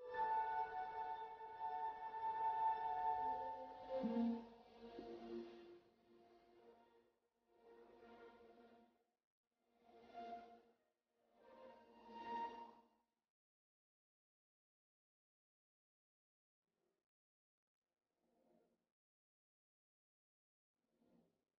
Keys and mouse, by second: 5.8 middle click, 6.5-8.1 middle drag, 13.6 click, 13.6 right click, 14.7 right click, 15.1-16.2 middle drag, 18.5 ctrl+e.